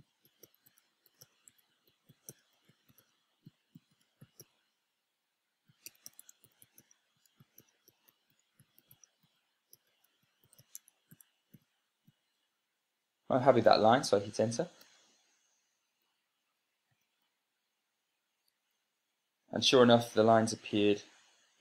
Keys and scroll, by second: 0.0-13.2 typing, 15.4 Return, 17.6 super+space, 19.1 Right.